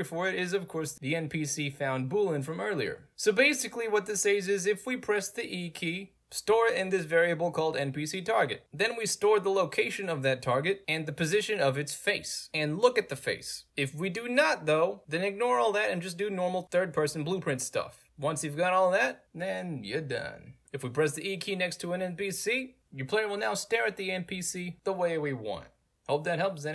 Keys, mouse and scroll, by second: 0.8 click, 3.5 click, 4.6 click, 6.7 click, 8.4 right click, 8.5 click, 10.4 click, 13.1 click, 14.0 ctrl+click, 14.3-14.8 scroll up 2, 14.8 click, 17.3 click, 18.2 right click, 19.1 w, 20.9-25.3 typing.